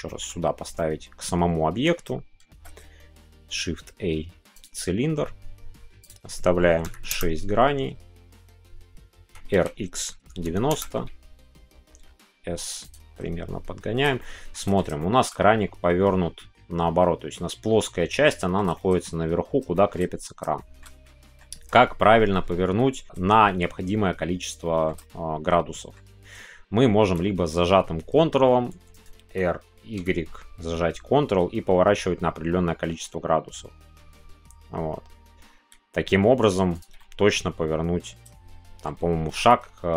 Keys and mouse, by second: 0.1 click, 0.7-1.8 middle drag, 2.4 shift+a, 6.0-9.2 drag, 9.2 r, 10.2 KP_9, 11.9 s, 12.8-14.0 drag, 14.1 shift+middle click, 14.9 shift+middle click, 18.2 shift+middle click, 18.7 middle click, 19.7 shift+middle click, 20.5 shift+middle click, 21.0 middle click, 24.6 shift+middle click, 25.0-27.2 middle drag, 30.0 y, 36.9-38.8 middle drag, 39.3 ctrl+z.